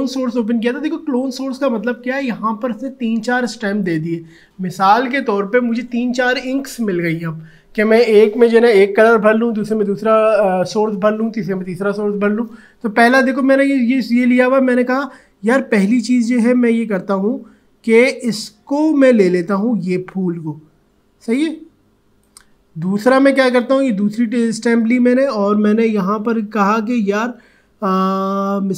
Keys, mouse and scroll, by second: 19.6-23.4 alt+drag.